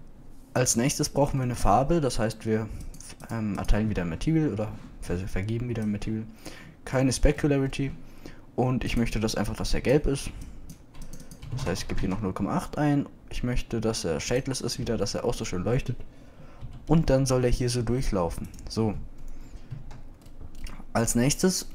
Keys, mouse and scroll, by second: 15.9 KP_0, 17.6 s, 20.8 KP_Decimal.